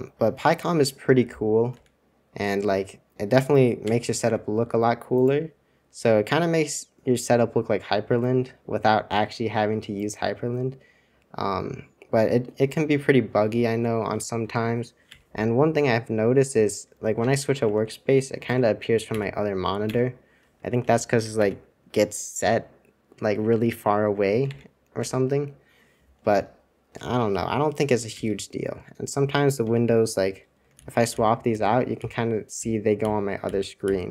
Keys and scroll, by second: 3.3 super+2, 3.8 super+1, 4.2 super+2, 15.2 super+1, 15.6 super+Return, 17.2 super+Return, 17.6 super+2, 18.4 super+1, 19.1 super+2, 19.8 super+1, 20.8 super+c, 21.0 super+c, 21.3 super+2, 24.6 super+1, 25.0 super+2, 28.3 super+1, 28.5 super+2, 29.6 super+Return, 30.7 super+j, 31.1 super+j, 31.5 super+j, 31.9 super+j.